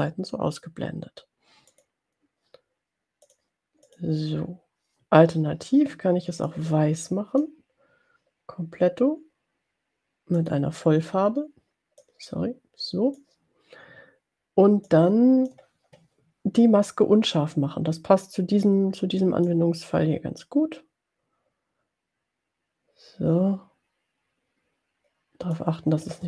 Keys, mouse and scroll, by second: 1.8 click, 3.5 click, 3.9 click, 6.6-7.6 drag, 10.6 click, 12.0-13.7 drag, 15.0 click, 19.6-25.8 drag.